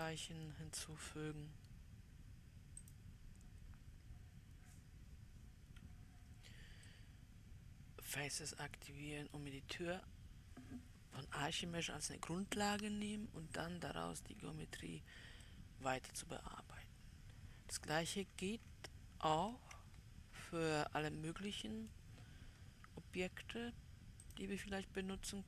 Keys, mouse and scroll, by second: 6.2 Escape, 7.4 middle click, 7.6 right click, 7.7 middle click, 8.3 right click, 8.4-10.3 middle drag, 10.3-14.8 right drag, 14.8-15.9 scroll down 3, 15.9-18.8 right drag, 15.9 middle click, 18.8-20.1 scroll down 7, 20.1 Tab, 21.3-24.7 right drag, 21.3 middle click, 24.7-25.4 drag.